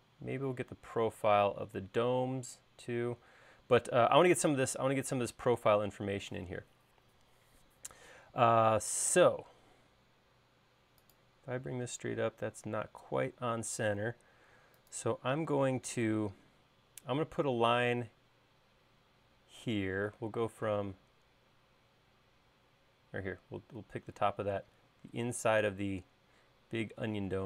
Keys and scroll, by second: 14.1 space, 17.7 i.